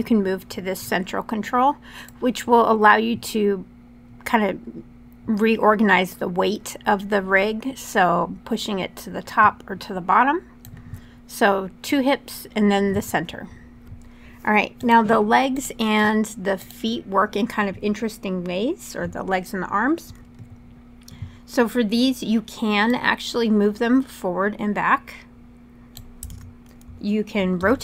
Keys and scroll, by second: 26.0 super+z, 27.3 e.